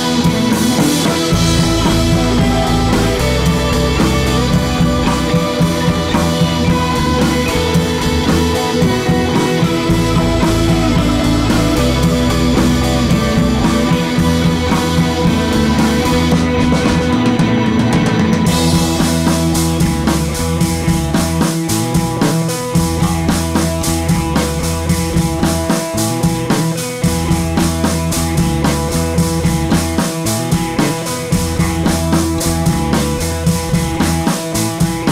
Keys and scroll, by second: 5.7 BackSpace, 6.2 BackSpace, 6.8 super+c, 6.8 super+v, 11.2 Left, 11.3 Left, 11.4 Left, 12.5 Left, 13.6 Right, 22.7 super+c, 22.7 super+v, 29.3 d.